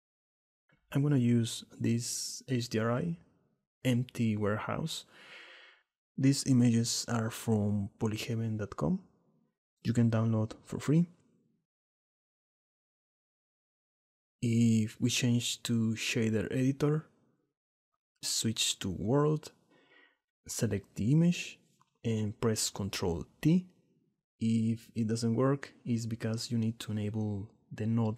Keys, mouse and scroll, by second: 12.2 shift+middle drag, 12.5 middle click, 15.9-17.1 drag, 18.2-19.4 drag, 20.2 click, 21.0-21.5 drag, 21.6 click, 23.0 ctrl+click, 25.2-26.4 drag, 27.2-28.1 drag.